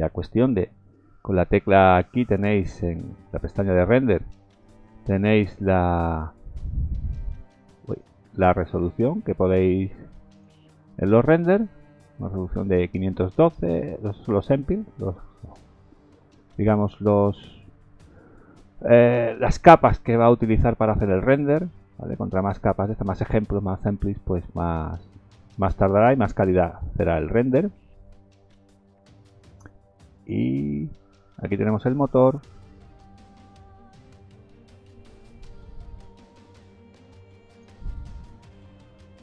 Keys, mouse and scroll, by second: 3.4 click, 7.0 click, 9.2 click, 11.7-12.0 scroll up 1, 14.1-14.7 scroll up 2, 29.0-29.4 scroll down 3, 29.4-30.1 scroll up 6, 32.3-33.8 scroll down 6, 33.8-34.2 scroll down 4, 34.2-35.5 scroll up 7, 35.5-36.4 scroll up 6, 36.4 click.